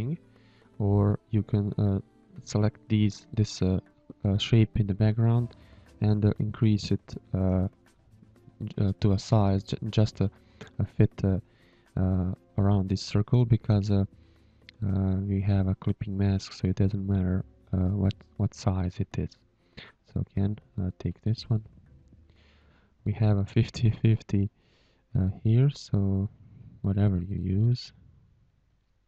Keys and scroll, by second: 0.3 Delete, 1.1 space, 2.4 h, 3.3 v, 16.3 space, 17.0 shift+a, 17.8 space, 19.1 space, 19.8 Delete, 20.5 g, 22.4 space, 23.4 space, 24.1 Delete, 24.9 g, 25.7 g, 27.3 a.